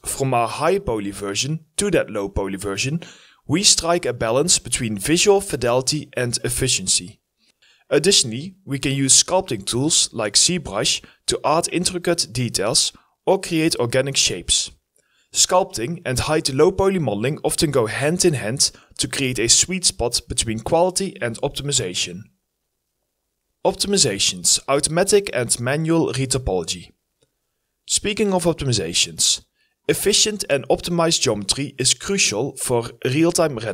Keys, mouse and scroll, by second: 0.5 scroll up 1, 1.4 scroll down 1, 1.5 alt+click, 2.1 right click, 2.5 f, 2.7 alt+click, 3.0 alt+scroll up 1, 5.1 scroll up 1, 5.2 alt+click, 6.4 scroll down 1, 7.0 alt+click, 9.4 ctrl+right click, 9.4 alt+click, 10.0 alt+click, 10.6 alt+click, 10.8 ctrl+right click, 11.7 alt+click, 12.8 alt+click, 13.8 ctrl+right click, 14.1 alt+click, 14.5 ctrl+right click, 15.0 ctrl+right click, 15.5 ctrl+right click, 15.5 alt+click, 16.0 alt+click, 16.0 ctrl+right click, 17.4 double click, 19.0 double click, 19.9 alt+click, 20.4 ctrl+right click, 20.4 ctrl+click, 21.9 double click, 22.2 ctrl+right click.